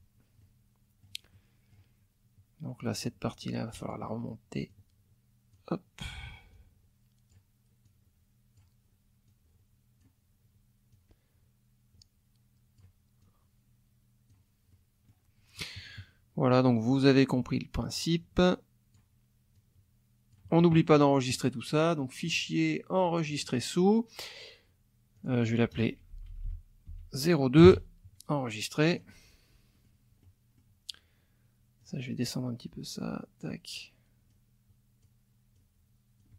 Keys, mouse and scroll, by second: 0.4 middle click, 1.3 middle click, 2.9-4.1 drag, 4.7-5.7 drag, 6.5 click, 7.8 click, 9.3 click, 10.9-13.0 drag, 13.2-14.5 drag, 14.7 middle click, 15.7 middle click, 16.8 click, 17.9-19.1 drag, 19.5 click, 22.3 click, 23.3 click, 25.2 click, 26.1 Left, 26.9 Right, 27.6 KP_0, 28.9 click, 29.7 click, 30.2 click, 30.4 middle click, 31.8-33.6 drag, 34.3 click, 35.5 click.